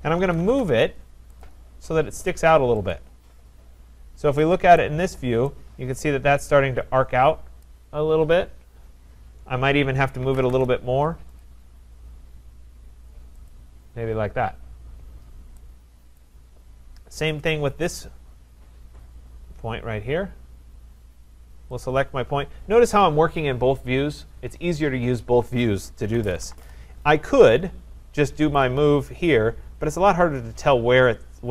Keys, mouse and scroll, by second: 0.0-0.9 typing, 1.4 click, 2.9 click, 4.0-4.3 scroll, 4.8 right click, 5.1-5.5 scroll, 7.6 right click, 10.0-10.9 typing, 11.4 click, 13.5 click, 16.2 right click, 17.8 click, 17.8-18.5 scroll, 18.5-19.8 scroll, 19.8-20.5 scroll, 21.9 click, 25.9-26.9 typing, 28.6 click.